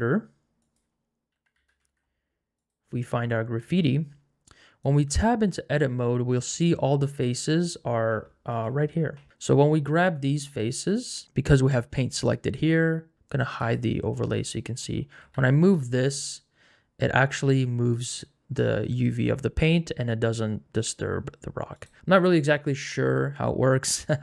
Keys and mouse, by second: 0.9-2.9 drag, 4.9 click, 5.2 Tab, 10.1 click, 13.6 click, 15.3 g.